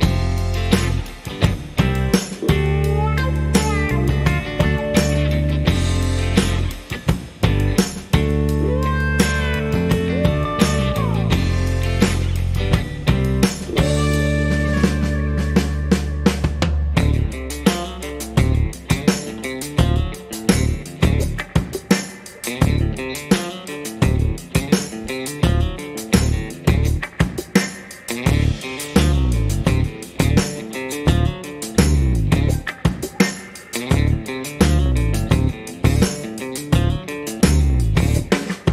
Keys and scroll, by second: 0.2-1.2 typing, 5.0-6.5 typing, 13.9 shift+a, 15.6 alt+s, 17.5 alt+s, 18.9 alt+s, 19.9 alt+s, 20.8 s, 22.1 alt+s, 24.4 alt+s.